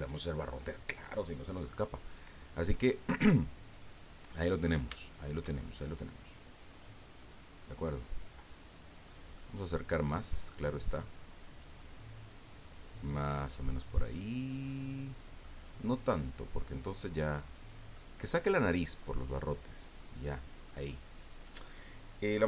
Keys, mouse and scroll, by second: 3.2-4.6 middle drag, 4.9-9.2 shift+middle drag, 9.4 middle click, 10.2-13.2 drag, 13.8-15.6 middle drag, 16.2-17.8 drag, 17.9-20.1 middle drag, 20.6 middle click.